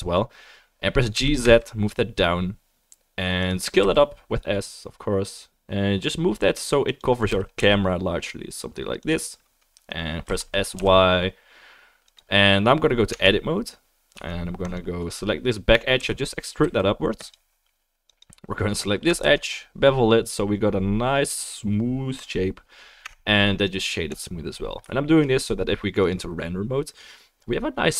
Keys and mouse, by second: 1.1 g, 3.8 s, 7.3 g, 10.2 s, 13.1 Tab, 14.1 2, 14.7 click, 14.7 middle click, 16.0 e, 18.1 click, 18.1-23.0 middle drag, 19.2 ctrl+b, 23.0 Tab.